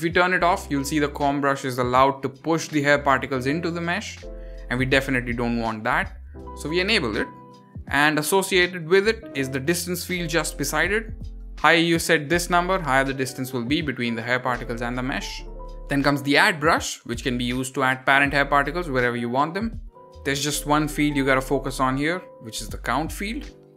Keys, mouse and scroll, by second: 0.2 click, 1.1 drag, 2.0 drag, 3.1 click, 4.3 drag, 5.1 ctrl+z, 5.3 ctrl+z, 5.5 ctrl+z, 5.7 ctrl+z, 5.9 ctrl+z, 7.4 click, 8.3 drag, 9.5 drag, 12.1 click, 17.5 click, 18.0-18.3 scroll up 2, 18.3 click, 18.6 click, 18.9 click, 19.1 click, 19.3 click, 19.6 click, 19.8 click, 20.1 click, 20.3 click, 20.6 drag, 20.8 drag, 21.0 drag.